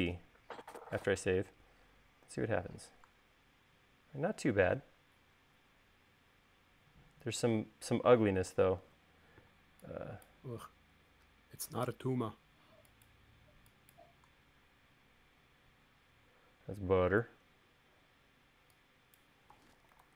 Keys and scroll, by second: 1.7 super+s, 2.9 u, 9.2 super+z.